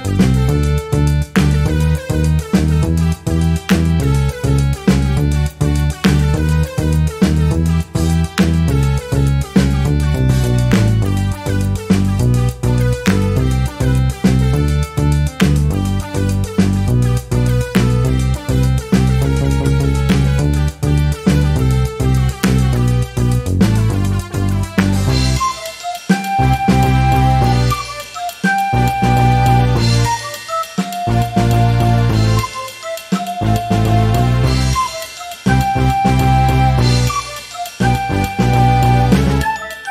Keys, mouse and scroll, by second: 0.0 ctrl+s, 1.7-2.0 scroll up 1, 2.7-4.0 ctrl+shift+scroll up 1, 5.5 shift+click, 6.7 click, 8.2 click, 9.6-13.8 shift+drag, 14.3 click, 15.5 click, 17.2 click, 17.9-21.1 drag, 22.8 click, 24.5 click, 25.9 click, 27.1 click, 27.5-27.9 ctrl+scroll up 2, 28.4-29.6 ctrl+drag, 30.7 ctrl+d, 31.7-33.3 drag, 33.7 shift+click, 35.6 ctrl+click, 36.3 click, 37.4 click, 38.5-38.9 ctrl+scroll up 2, 39.3 ctrl+click.